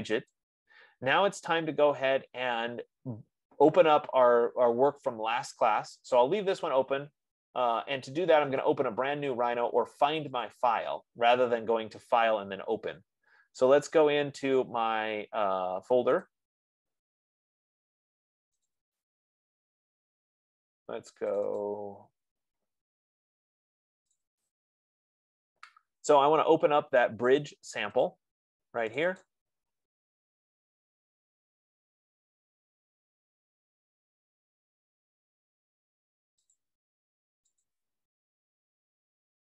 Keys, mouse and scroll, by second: 0.7 click, 9.0 click, 10.7 click, 16.6 click, 19.1 click, 19.2 click, 21.7 click, 22.0 click, 24.7 click, 24.8 click, 28.4 click, 29.4 click, 29.6 click, 37.0 click, 38.1 click.